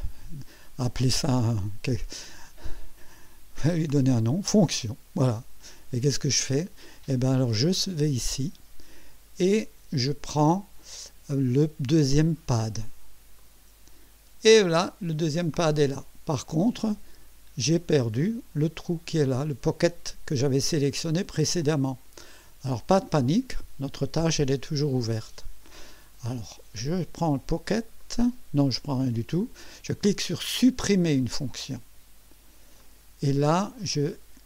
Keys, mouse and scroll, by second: 4.5 click, 8.3 click, 13.4 click, 24.6 click, 28.0 click, 28.7 click, 29.4 click, 30.9 click, 32.8 click.